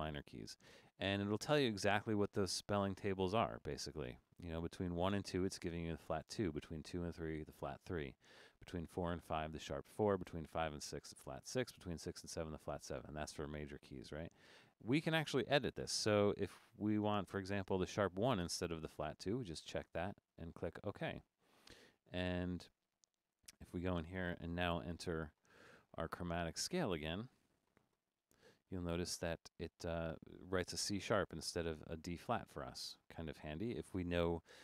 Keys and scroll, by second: 29.1 Escape.